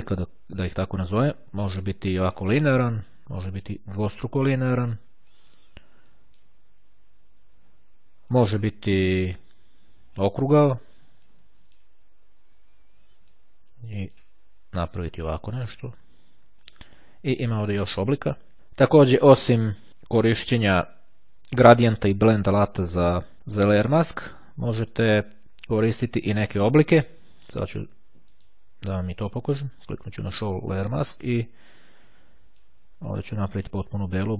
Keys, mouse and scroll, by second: 3.1 click, 3.8-4.9 drag, 6.3 click, 8.5 click, 9.3-10.9 drag, 11.3-12.3 drag, 13.4-14.8 drag, 16.8 click, 23.3 click, 24.1 click, 24.9-28.8 right drag, 29.9 click, 32.1-33.1 drag, 33.9-34.3 right drag.